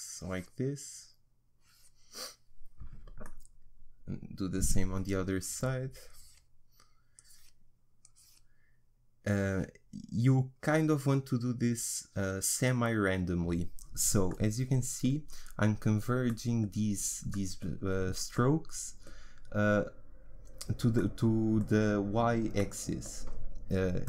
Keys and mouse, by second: 3.3-6.0 middle drag, 6.0-14.4 drag, 14.4-21.4 middle drag.